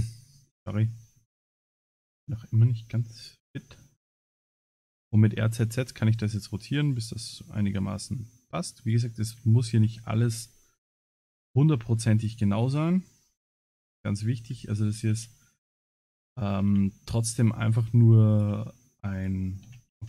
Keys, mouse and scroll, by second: 0.2-0.5 scroll up 3, 0.9 shift+middle click, 1.9 middle click, 4.1 r, 9.7 s, 11.5 middle click, 12.2 shift+middle click, 13.5 middle click, 14.4 g, 18.8 middle click, 19.1 click, 19.8 ctrl+s.